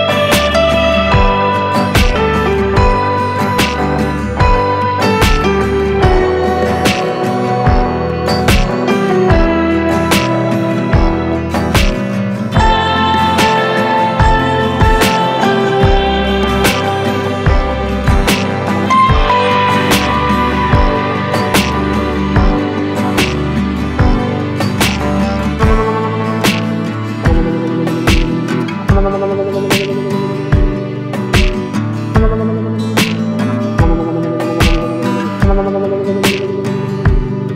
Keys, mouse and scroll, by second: 1.4 ctrl+space, 4.4-8.1 drag, 8.1 Delete, 9.5 ctrl+space, 9.5 Caps_Lock, 12.7-18.4 drag, 18.4 right click, 19.4 click, 25.9 right click, 29.2 ctrl+Num_Lock, 29.2 right click, 29.8 ctrl+alt+scroll up 1, 34.6 ctrl+alt+Num_Lock, 34.6 ctrl+alt+scroll down 1, 35.8 click.